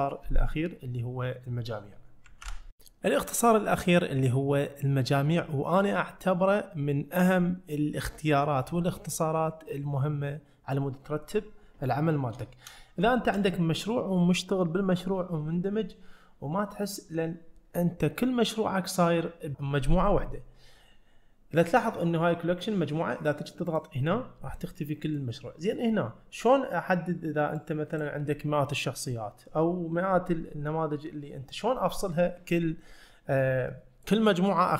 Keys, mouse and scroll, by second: 12.5 shift+middle click, 13.1 shift+middle click, 23.8 click, 25.1 click, 27.6 click, 33.8 middle click.